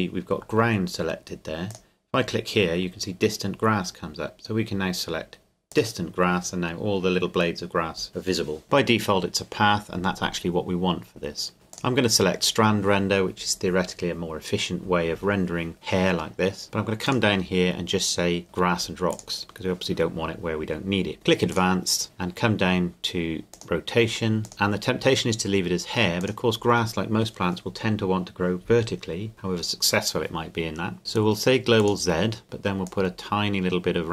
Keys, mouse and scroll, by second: 1.7 click, 5.7 click, 9.8-10.5 scroll down 1, 11.7 click, 15.7-17.1 scroll down 1, 17.1 click, 19.1 click, 21.5 click, 23.3 scroll down 1, 23.5 click, 26.2 click, 31.8 click.